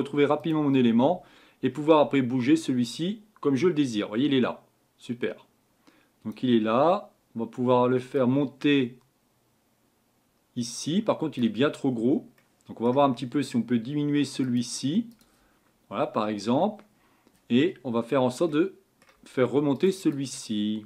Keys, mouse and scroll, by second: 3.1-5.9 drag, 8.4-11.2 drag, 14.6-20.8 drag.